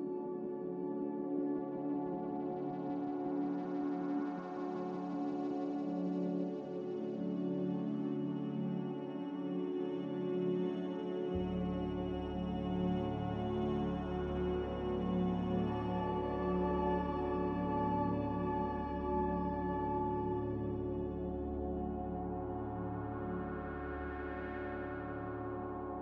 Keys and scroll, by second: 3.4 ctrl+z, 4.0 ctrl+z, 9.9 a, 15.8 b, 16.8 Delete, 19.1 Delete, 23.5 ctrl+z.